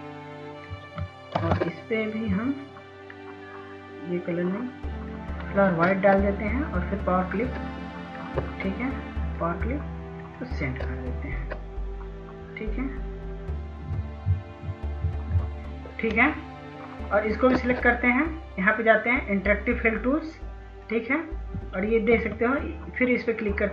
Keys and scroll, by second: 3.9 ctrl+space, 21.1 ctrl+s, 21.4 ctrl+s, 22.0 ctrl+s, 23.4 ctrl+s.